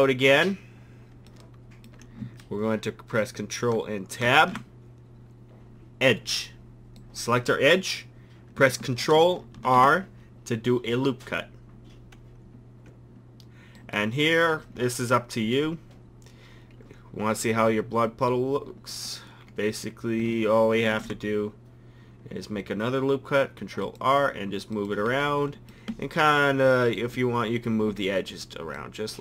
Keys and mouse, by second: 4.3 ctrl+Tab, 9.6 ctrl+r, 15.6-17.3 drag, 17.5-19.1 middle drag, 20.9 ctrl+r, 27.0-29.2 drag.